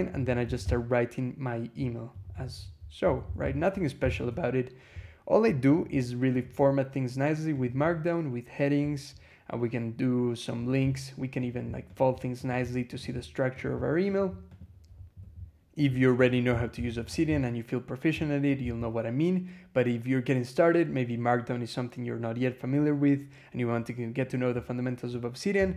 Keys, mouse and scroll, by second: 0.0-1.0 typing, 2.9 k, 3.5 Escape, 3.8 g, 4.2 Escape, 5.5 click, 6.2 click, 7.4 click, 8.4 scroll down 1, 11.3 click, 11.8 click, 12.3 click, 12.8 click, 13.4 click, 13.9 click, 14.3 click, 15.1 e, 16.1 click, 16.3 Escape, 16.6 g, 16.9 Escape, 17.1 j, 25.4 1.